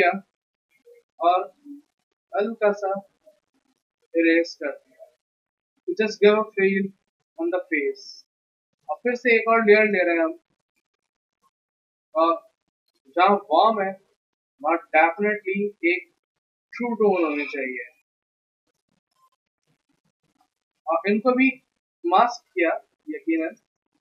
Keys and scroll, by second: 5.5 v, 8.4 b, 20.1 v.